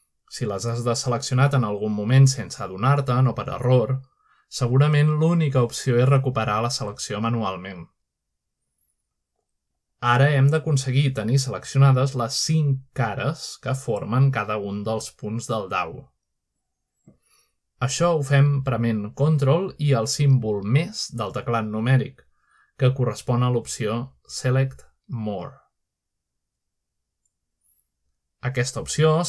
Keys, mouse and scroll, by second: 0.0-0.3 scroll up 2, 0.4 shift+middle click, 5.6 shift+middle click, 6.3 shift+middle click, 6.6 scroll down 1, 7.1 scroll up 1, 7.6 scroll down 1, 10.3 middle click, 10.6-11.5 scroll up 1, 11.7 shift+middle click, 12.0-12.9 scroll up 1, 13.5 shift+middle click, 13.9 shift+middle click, 16.4 z, 25.7 ctrl++, 26.7-27.6 drag.